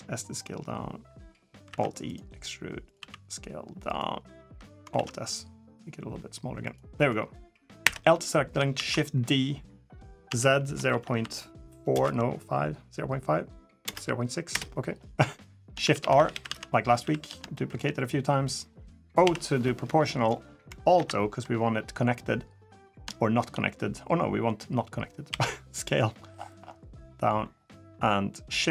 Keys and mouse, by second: 1.5 alt+e, 2.7 s, 4.7 alt+s, 7.6 l, 8.5 shift+d, 15.6-15.9 shift+r, 16.1 shift+r, 16.2 shift+r, 16.8 shift+r, 17.3 shift+click, 19.0 o, 20.7 alt+o, 23.0 shift+middle click, 25.1 s.